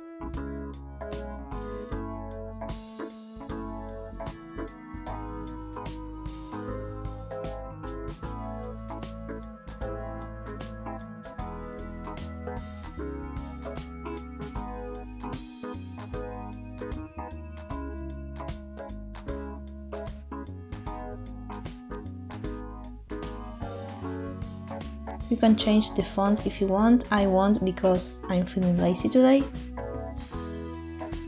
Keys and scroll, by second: 2.5 Insert, 4.3 Tab, 5.6 BackSpace, 5.7 BackSpace, 6.0 BackSpace, 6.3 BackSpace, 13.1 f, 17.3 6, 17.4 0, 17.6 Return, 18.1 4, 18.4 Return, 19.3 2, 19.6 Return, 19.6 0, 20.8 0, 21.2 Up, 21.3 Up, 21.5 Up, 21.7 Left, 23.1-24.4 typing, 23.2 Return, 23.4 Up, 23.6 Up, 24.5 Return.